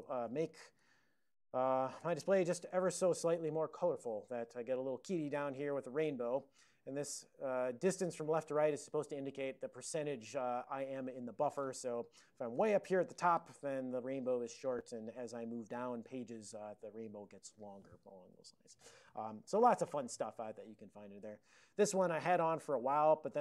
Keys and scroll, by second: 0.0-1.0 typing, 12.6 alt+<, 15.3 ctrl+v, 15.6 ctrl+v, 21.8 ctrl+p, 22.0 ctrl+p, 22.9-23.4 ctrl+p.